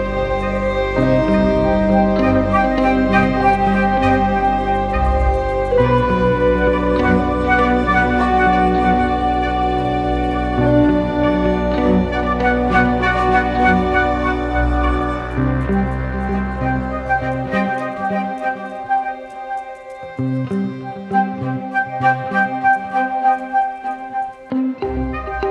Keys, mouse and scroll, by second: 18.5-19.8 typing, 22.5 ctrl+-.